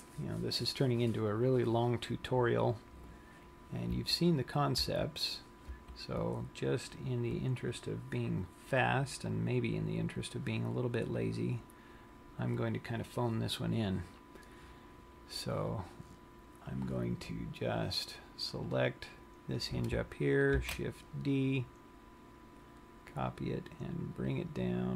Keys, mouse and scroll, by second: 4.5 Tab, 5.4 Tab, 6.2 Tab, 7.3 scroll down 1, 9.2 scroll up 4, 10.1-10.6 scroll up 2, 16.7 scroll down 1, 19.3 click, 21.2 shift+d.